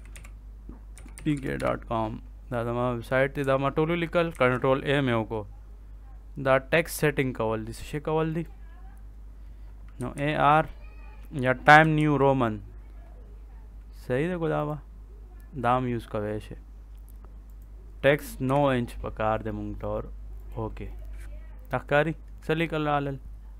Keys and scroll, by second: 0.0-2.0 typing, 4.2 ctrl+a, 9.6-12.4 typing, 18.4 9.